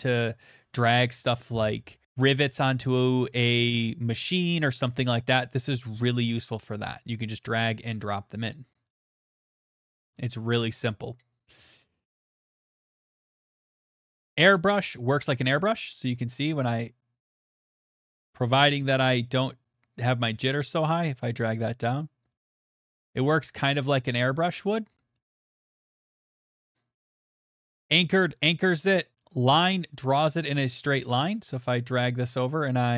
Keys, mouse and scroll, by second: 6.2 middle click, 7.3 click, 8.3 click, 9.5 click, 11.8 click, 12.4 middle click, 12.4 click, 12.8 click, 13.0 click, 13.3 click, 13.6 scroll, 13.7 middle click, 14.0 middle click, 14.2 click, 14.6 middle click, 15.1 middle click, 15.6 click, 16.1 click, 16.7 click, 17.7 middle click, 17.7 middle click, 19.0 click, 20.1-23.6 click, 20.1 right click, 21.2 right click, 21.7 right click, 22.0 right click, 22.3 right click, 22.5 right click, 22.7 right click, 22.9 right click, 23.1 right click, 23.4 right click, 23.7 click, 24.0 click, 24.1 click, 24.7 click, 25.1 middle click, 26.4 click, 27.7 middle click, 27.7 click, 28.5 click, 29.3 click, 30.6 click, 31.6 click.